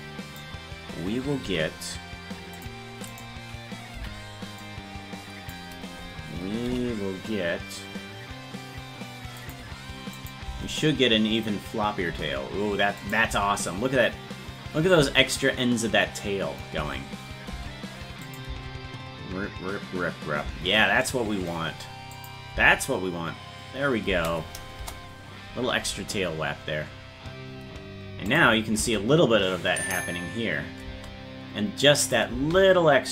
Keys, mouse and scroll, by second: 1.5 g, 3.1 right click, 4.0 b, 6.7 g, 10.2 click, 10.5 space, 13.0 click, 13.3 space, 16.8 space, 18.3 click, 18.5 space, 22.2 click, 22.6 space, 24.8 KP_0, 28.3 click, 28.8 space, 32.1 click, 32.3 space.